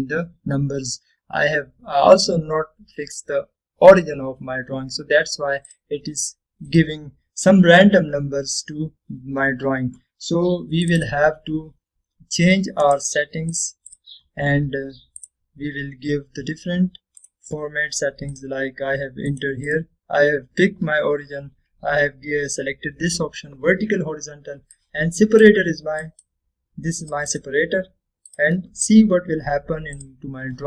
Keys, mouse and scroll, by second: 6.8 click, 8.6-9.3 scroll up 1, 9.3-9.7 scroll down 1, 9.7-10.2 scroll up 1, 10.2 scroll down 1, 11.9 click, 13.9 right click, 14.6 click, 19.7 click, 25.9-26.7 click.